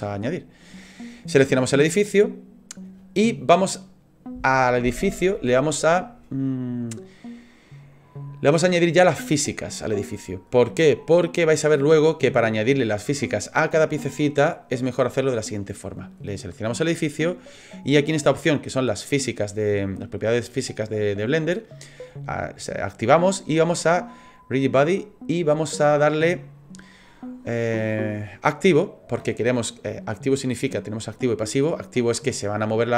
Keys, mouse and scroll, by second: 0.0 shift+middle click, 1.2 right click, 19.5 click, 24.7 click, 28.7 click.